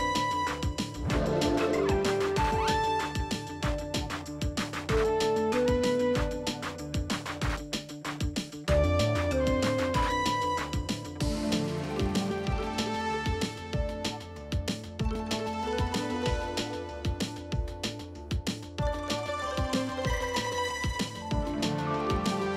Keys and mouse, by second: 0.7-1.5 middle drag, 1.6 Tab, 1.8 middle click, 2.3 Tab, 2.3 KP_1, 3.3 Tab, 4.1 alt+click, 5.1 alt+z, 6.2 shift+click, 7.1 shift+click, 7.5 middle click, 8.2 shift+click, 8.8 alt+z, 9.0 middle click, 9.3 KP_1, 9.8 s, 11.3 g, 12.6 click, 13.4 Tab, 14.0 ctrl+s, 14.2 middle click, 15.0 drag, 16.0 click, 16.5 click, 17.4 g, 19.5-20.5 drag, 19.9 p, 21.1 middle click, 21.4 shift+middle click, 22.0 ctrl+s.